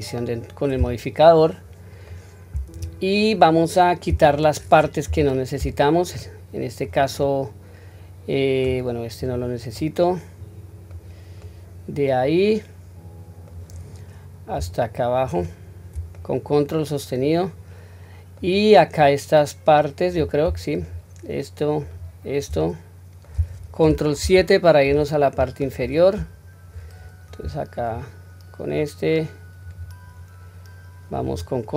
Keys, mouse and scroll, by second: 2.0-4.1 middle drag, 5.0 3, 6.0-6.7 middle drag, 7.1-8.5 middle drag, 9.1 click, 9.7-10.8 middle drag, 11.3-13.4 middle drag, 15.1 ctrl+click, 16.1-18.4 middle drag, 18.8-20.1 middle drag, 20.7 shift+click, 21.7 shift+click, 22.5-23.1 middle drag, 24.1 ctrl+KP_7, 25.3-26.2 scroll up 2, 26.2-27.1 scroll down 1, 27.7 ctrl+click, 29.5 ctrl+click, 31.0 ctrl+click.